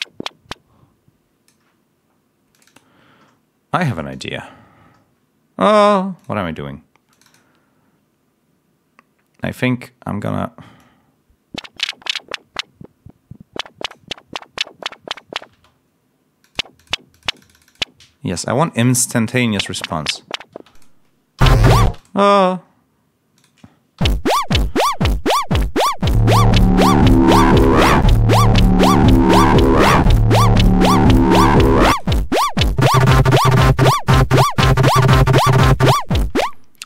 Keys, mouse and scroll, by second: 2.4 click, 3.8 click, 6.1 click, 7.0 click, 10.7-14.0 drag, 14.7 click, 15.4 space, 16.3 click, 16.7 click, 17.0 click, 19.4 l, 23.3 click, 23.9 l, 24.2 scroll up 1, 24.9 scroll up 1, 26.0 click, 29.6 click, 30.2 ctrl+scroll down 1, 31.8 click, 32.7 click, 36.3 space, 36.5 ctrl+scroll up 1.